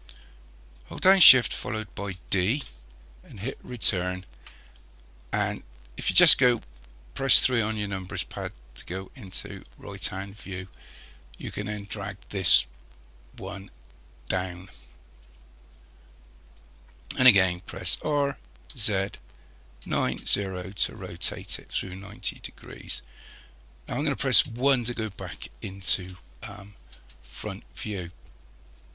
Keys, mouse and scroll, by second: 2.0 shift+d, 7.7 KP_3, 11.5 click, 18.0 r, 24.3 KP_1, 26.6-27.8 scroll down 3.